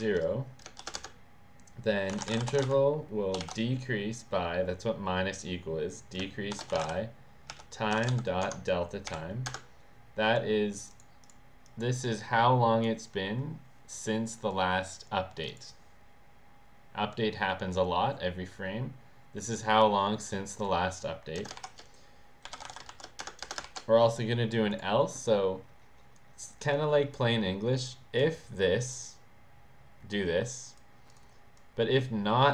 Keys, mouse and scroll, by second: 0.0-0.8 typing, 0.9 Return, 1.8-3.3 typing, 6.2-9.0 typing, 9.4 Return, 10.8 click, 10.9 click, 11.2 click, 11.6 click, 12.0 click, 15.3 click, 19.4 click, 20.5 click, 21.4 Return, 22.2-23.6 typing, 23.4 Return, 24.6 click, 26.1 click, 27.8 click, 28.2 click, 30.1 click, 31.0 click, 31.5-32.5 drag.